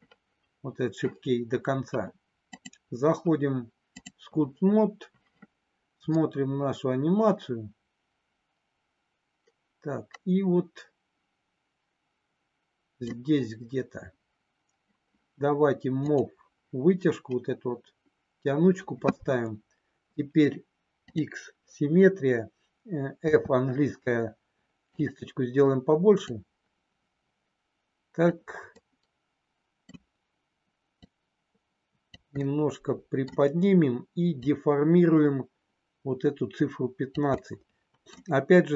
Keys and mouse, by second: 2.5-4.1 drag, 6.1-13.2 drag, 16.0 click, 23.1 f, 26.2-28.2 drag, 28.6-29.9 middle drag, 31.0-32.1 drag, 32.2 middle click, 34.4-37.1 drag, 37.4 middle click.